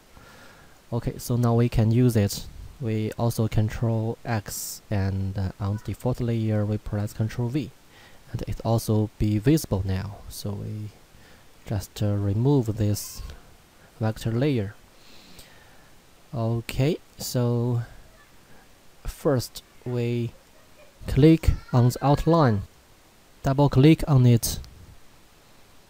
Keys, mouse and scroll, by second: 0.7 click, 3.4 ctrl+Num_Lock, 4.2 ctrl+x, 5.3 click, 7.2 ctrl+v, 10.7 click, 19.3 click, 22.6 click.